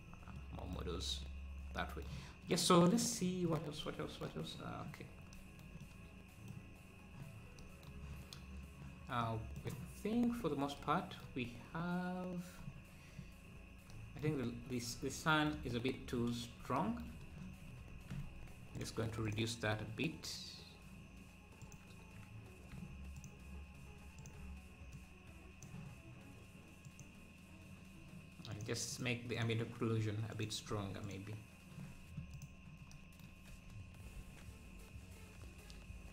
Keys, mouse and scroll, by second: 0.4 middle click, 1.2-1.8 scroll up 1, 5.0-5.3 scroll down 2, 5.8-6.9 middle drag, 6.9 scroll up 1, 9.2 middle click, 10.5-10.8 scroll up 3, 12.8-13.2 scroll down 4, 13.2 scroll up 3, 14.5-15.1 scroll down 2, 16.0 scroll up 1, 17.5 scroll down 2, 18.7-32.0 drag, 32.0-32.3 scroll down 1, 32.3 click, 33.5 ctrl+s, 34.2 ctrl+s.